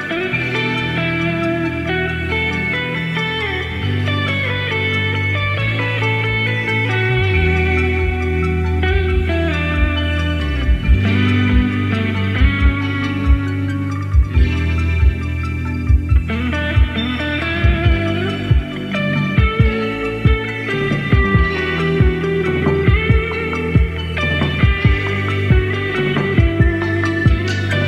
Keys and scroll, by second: 0.4 Left, 0.6 Left, 0.9 Right, 1.0 Right, 2.1 Right, 2.4 Left, 11.5 Right, 12.0 Left.